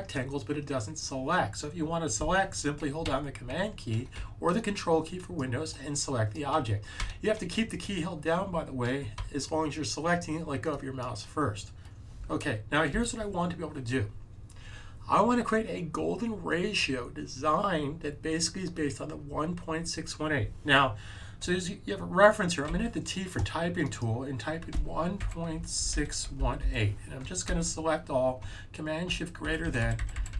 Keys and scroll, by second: 22.6 t, 24.4-27.0 typing, 27.4 super+a, 29.3 shift+super+., 29.5 shift+super+., 29.7 shift+super+., 29.8-30.3 typing.